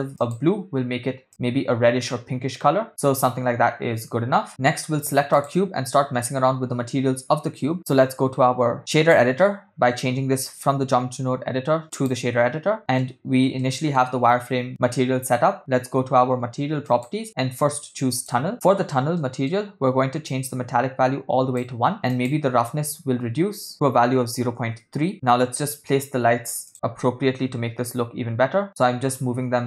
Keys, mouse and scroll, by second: 0.2 click, 5.3 click, 8.8-12.2 drag, 12.8 middle click, 13.6 ctrl+middle click, 16.9 click, 18.1 click, 19.2 middle click, 20.3-21.7 drag, 23.7-24.7 drag, 26.7 click, 26.7 g.